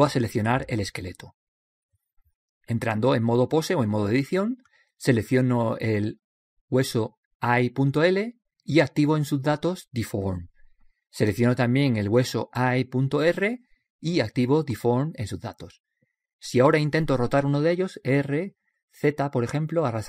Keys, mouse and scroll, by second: 0.0 click, 1.5-3.4 right drag, 3.4-5.3 drag, 6.6-10.0 drag, 8.4-10.2 right drag, 10.6-12.3 drag, 12.4-14.3 right drag, 15.5-17.3 drag, 19.4-20.0 drag.